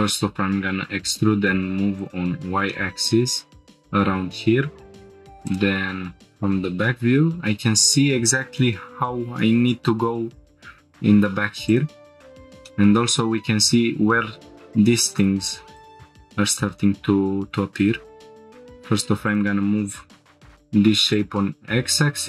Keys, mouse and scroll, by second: 0.4 e, 0.6 y, 2.0 click, 2.7 shift+middle click, 5.5 click, 6.4 scroll up 1, 9.7-10.4 scroll up 3, 11.7 click, 12.3 scroll down 3, 12.6 shift+middle click, 13.2-13.5 scroll up 2, 15.1 click, 16.2 1, 16.5 click, 17.5 g, 17.9 x, 19.3 click, 21.1-22.2 drag.